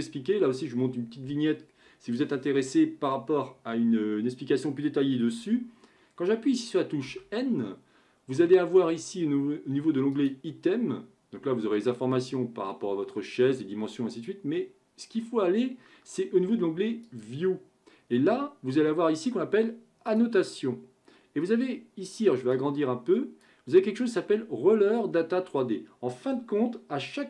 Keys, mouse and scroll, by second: 7.1 n, 10.2 click, 17.0 click, 20.1-25.7 drag.